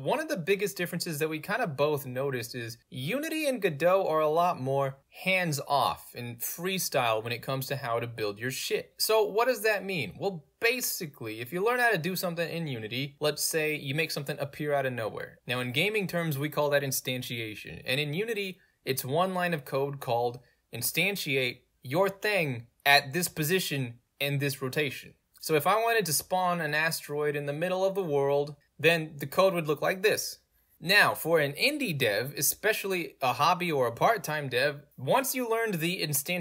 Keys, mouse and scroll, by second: 3.0 middle click, 3.0-3.6 scroll down 2, 6.2 click, 7.2 click, 8.6-9.4 drag, 10.3 click, 10.9 0, 11.0 Tab, 11.0 0, 11.1 Tab, 11.2 0, 11.3 Return, 12.8 click, 13.5 0, 13.8 Return, 14.5 alt+right click, 15.2 alt+click, 17.0 click, 20.2 ctrl+v, 21.5-23.9 typing, 22.6 click, 23.7 click, 28.0 click, 30.1 ctrl+shift+Right, 30.5 click.